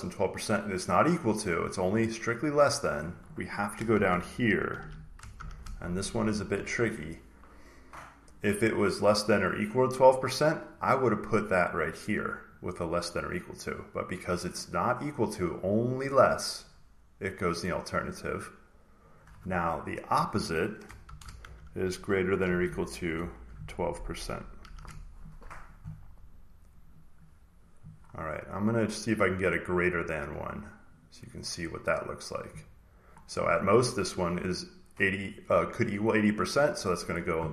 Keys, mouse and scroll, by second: 0.5 click, 2.8 click, 3.8-6.3 typing, 10.0 click, 11.0 click, 12.5 click, 13.5 click, 15.4 click, 17.7 click, 19.0 click, 20.9-24.6 typing, 26.7 click, 26.9-28.1 drag, 28.1 scroll down 1, 29.5 scroll down 1, 29.7 scroll up 1, 30.0 scroll, 30.1 scroll down 2, 30.4-30.9 scroll up 1, 30.9 click, 31.4 scroll down 2, 32.9 scroll, 35.1 click.